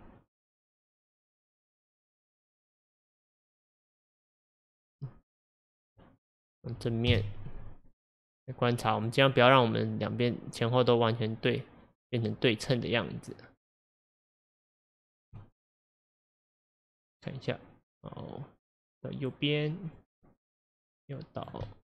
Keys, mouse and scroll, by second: 2.2 click, 4.5 click, 6.3-7.1 middle drag, 7.1 KP_1, 8.4 drag, 9.0 click, 9.8 click, 14.2 click, 14.8 click, 15.4-16.1 middle drag, 16.1-17.2 scroll down 1, 17.2-21.0 drag, 21.7-21.9 middle drag.